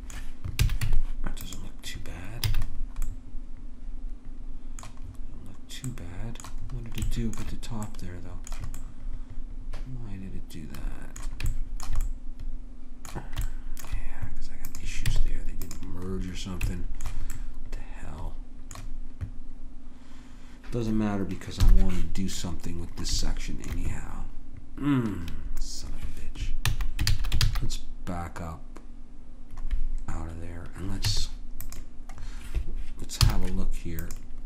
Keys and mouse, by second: 0.6 a, 0.8 Tab, 2.5 a, 10.2 middle click, 11.5-12.6 middle drag, 14.7 click, 15.0 Tab, 21.7 KP_7, 26.7 ctrl+z, 27.1 ctrl+z, 27.4 ctrl+z, 31.0 Tab, 33.2 z.